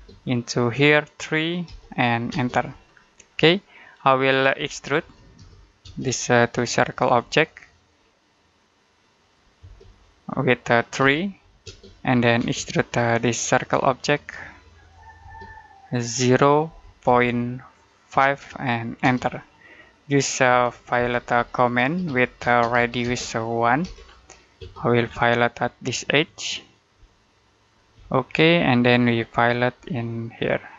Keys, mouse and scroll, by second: 1.5 3, 2.2 space, 4.2-5.7 typing, 6.9 click, 9.5 space, 10.9 3, 11.5 space, 13.3 click, 15.1 space, 16.5 typing, 17.7-18.9 typing, 20.4-24.5 typing, 24.9-26.1 scroll up 1, 26.1 click, 26.8 space, 27.4 click, 27.8 space, 28.2-28.5 scroll down 1, 28.5 middle click, 29.1-29.6 scroll up 1, 29.6 space, 30.2 click.